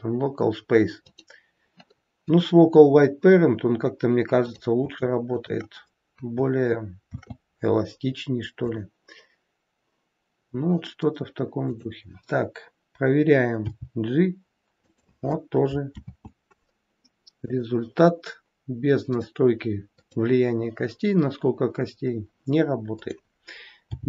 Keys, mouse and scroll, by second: 4.3 click, 5.2 shift+click, 6.9 ctrl+shift+c, 11.6 click, 13.6 g, 15.9 ctrl+z, 17.3 click, 19.1 click, 19.9 click, 22.8 click, 23.8 g.